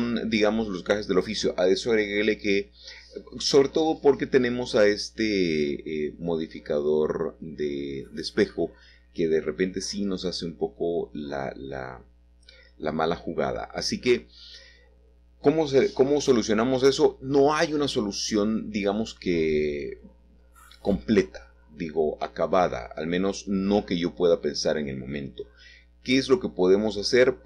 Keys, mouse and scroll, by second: 1.0 middle click, 1.4 middle click, 2.4-3.0 scroll up 1, 3.0 shift+middle click, 4.4-5.7 scroll down 2, 5.3 middle click, 5.7-9.4 middle drag, 10.5 click, 14.2-15.4 drag, 15.4 middle click, 16.3 middle click, 19.8-20.9 drag, 21.0-22.1 drag, 22.8 Tab, 25.4-27.2 middle drag, 27.2 click.